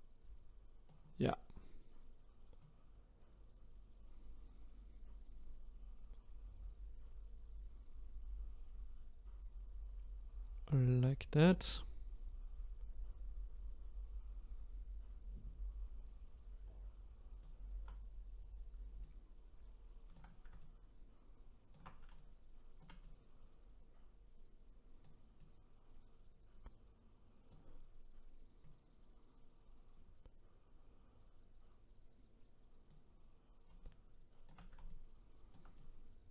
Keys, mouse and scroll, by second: 2.6-5.6 drag, 19.1-28.6 shift+right drag, 28.6-31.6 drag, 33.8-36.3 shift+right drag.